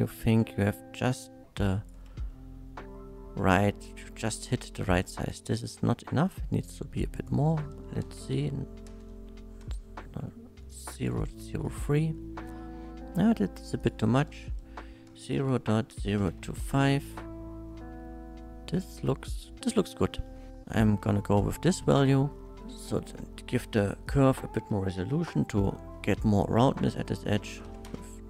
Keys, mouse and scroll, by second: 2.3-4.7 shift+middle drag, 4.9 middle click, 5.7 middle click, 7.1 shift+click, 8.0 KP_0, 8.3 KP_0, 8.9 KP_0, 9.2 KP_3, 9.6 Return, 10.6 KP_0, 10.6 middle drag, 11.0 click, 11.8 KP_1, 13.8 click, 15.2-16.4 typing, 16.6 Return, 17.8 middle click, 19.9 shift+middle click, 21.0-22.1 shift+middle drag, 22.6 shift+middle click, 24.0 shift+click, 27.6 KP_2, 27.6 KP_4, 27.7 KP_2, 27.8 Return.